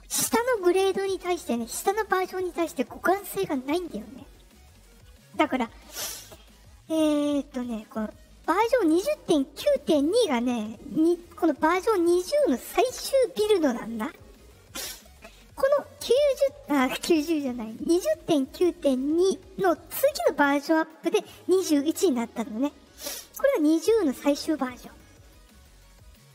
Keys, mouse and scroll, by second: 10.0 click, 12.1 click, 13.9 click, 15.5 click, 18.4 click, 18.9 click, 20.6 click, 25.9 click.